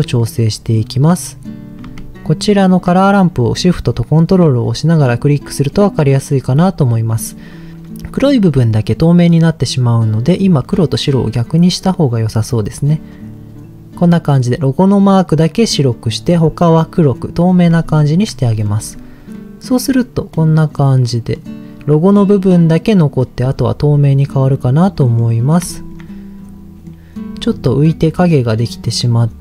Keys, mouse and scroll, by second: 0.2 middle click, 4.9 ctrl+shift+click, 5.6 middle click, 11.0 click, 11.6 click, 12.7 click, 17.9 ctrl+shift+click, 18.5 middle click, 18.8 click, 19.3 middle click, 20.3-21.4 middle drag, 22.1 middle click, 23.3-24.2 scroll up 4, 23.8 middle click, 25.0 middle click, 25.7 shift+middle click, 26.1-26.7 scroll up 2, 26.7 middle click, 27.4 scroll down 2, 28.0 middle click, 28.6 middle click, 28.6-29.4 scroll up 4.